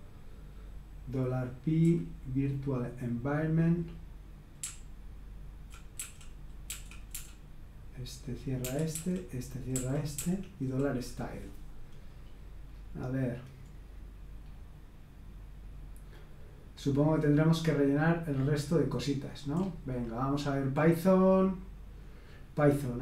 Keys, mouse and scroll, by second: 0.0-1.2 typing, 4.6-7.1 typing, 8.6-10.1 typing, 12.1-13.7 scroll down 1, 13.7-15.5 scroll down 1, 15.5-16.1 scroll down 1, 16.1-17.8 scroll down 1, 17.8-19.3 scroll down 1, 19.5-19.9 scroll up 2, 19.9-20.4 scroll down 2, 20.4-21.6 scroll down 1, 21.8-22.7 scroll down 2, 22.9 click.